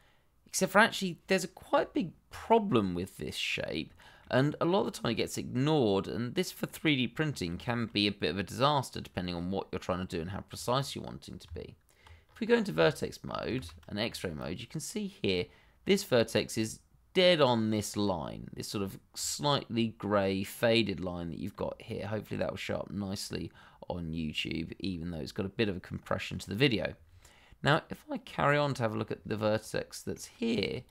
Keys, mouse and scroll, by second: 3.9 shift+middle click, 4.0 middle click, 4.1 shift+middle click, 4.3-6.4 scroll up 1, 7.6 shift+middle click, 7.7 middle click, 7.8 shift+middle click, 7.9-8.3 scroll up 1, 8.8 scroll down 1, 9.2 shift+middle click, 10.3 shift+middle click, 10.3 middle click, 10.5 shift+middle click, 11.4 Tab, 12.2-12.5 scroll up 1, 13.0 shift+middle click, 13.5 shift+z, 14.0-14.3 scroll up 1, 14.3 click, 15.3-15.8 scroll down 1, 15.8-17.8 scroll up 1, 18.5 scroll down 1, 18.8 shift+middle click, 19.3-20.3 scroll up 1, 21.5 scroll up 1, 21.7-22.1 scroll down 1, 27.2 shift+middle click, 30.8 click.